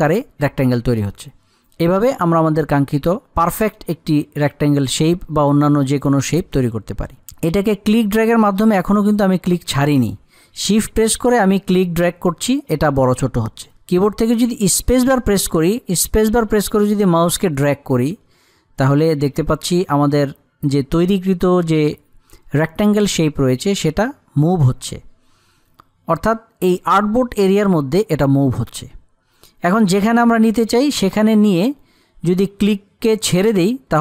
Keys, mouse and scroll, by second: 15.3 shift+space, 24.9 shift+space.